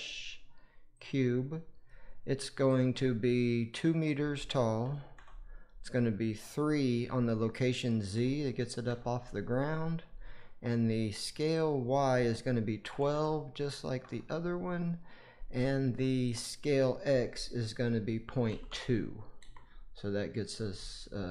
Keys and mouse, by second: 3.7-5.1 drag, 6.4-8.8 drag, 11.5-13.9 drag, 16.3-19.3 drag.